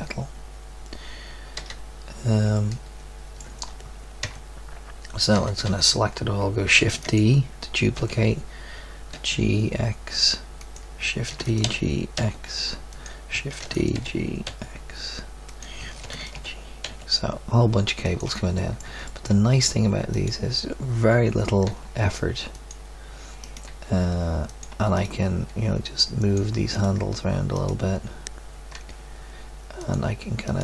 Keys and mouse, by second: 1.8 z, 2.5 middle drag, 4.2 Tab, 5.3 a, 6.8 a, 6.8 shift+d, 7.9 g, 11.3 shift+d, 11.6 g, 13.6 shift+d, 13.9 g, 16.0 shift+d, 16.3 g, 18.5 click, 21.7 g, 23.6 g, 25.5 g, 28.7 g.